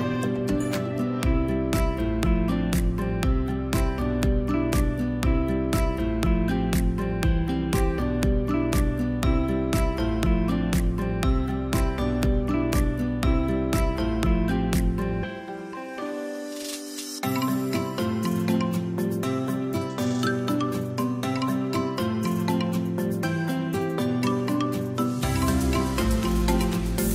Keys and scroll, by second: 0.2 v, 0.9 space, 5.9 i, 7.1 v, 8.8 i, 9.9 v, 13.1 i, 15.1 v, 16.7 i, 17.6 v, 21.4 Delete, 22.1 space, 26.8 0, 26.9 1.